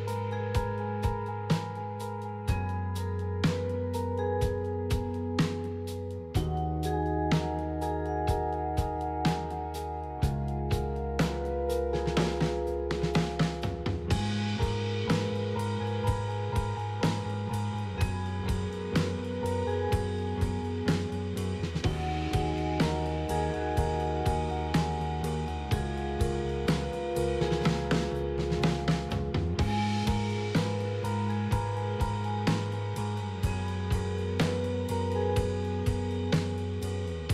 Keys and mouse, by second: 1.8 KP_3, 4.0-5.4 middle drag, 7.0 alt+click, 12.3 alt+click, 13.4 middle click, 14.4 alt+click, 15.3 middle click, 17.6 Tab, 18.6 a, 18.7 KP_3, 19.2 KP_Decimal, 24.3-26.2 middle drag, 26.4 Tab, 27.1 alt+click, 29.8 KP_3, 30.0 KP_Decimal, 32.0 1, 34.3 click.